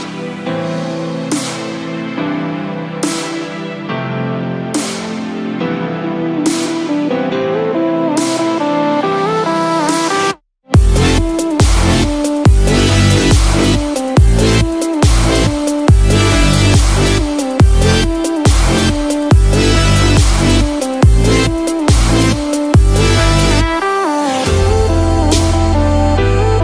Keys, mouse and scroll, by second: 0.1 click.